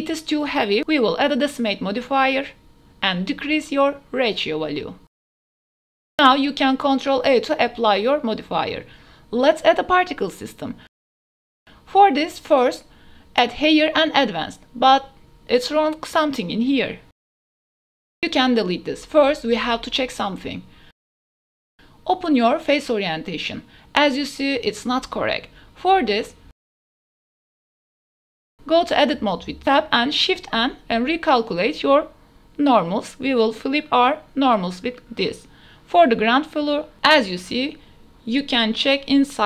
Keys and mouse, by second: 1.5-2.2 drag, 3.3-5.3 drag, 6.0 ctrl+a, 6.4 click, 7.4 ctrl+a, 7.6 click, 8.2 click, 9.4 ctrl+a, 9.6 drag, 10.2 click, 11.1 click, 11.2 ctrl+s, 11.5-12.8 drag, 13.8 click, 14.6 click, 16.4 click, 17.2 shift+drag, 17.7-18.4 drag, 19.9 click, 20.5 click, 20.7 ctrl+s, 21.4-23.2 drag, 23.8-26.1 drag, 26.3 shift+drag, 27.3 Tab, 28.4 a, 28.8 click, 30.9 shift+n, 31.5 click, 32.4 Tab, 32.8 click, 33.2 Tab, 34.1 a, 34.8 Tab, 36.1 Tab, 36.6 a, 38.2 shift+n, 38.6 click.